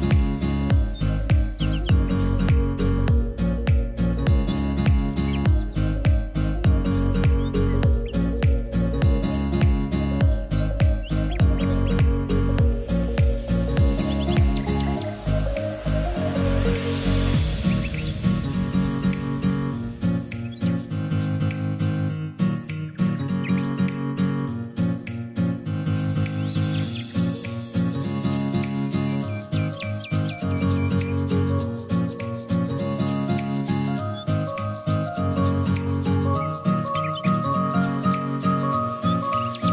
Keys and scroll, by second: 7.8 e, 18.7-20.4 typing.